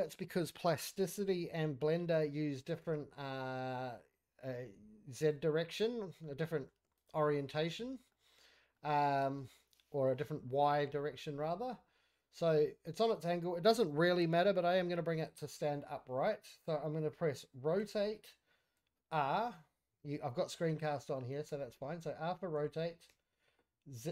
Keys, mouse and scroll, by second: 2.8 x, 5.3 typing, 6.2-6.7 middle drag, 6.8 scroll up 1, 7.0 click, 7.3 scroll down 1, 7.4 middle click, 7.8-8.1 scroll down 3, 8.1 middle click, 8.5 scroll up 2, 8.7-10.7 middle drag, 11.1-11.9 middle drag, 12.1 middle click, 12.4-13.0 middle drag, 17.8 r.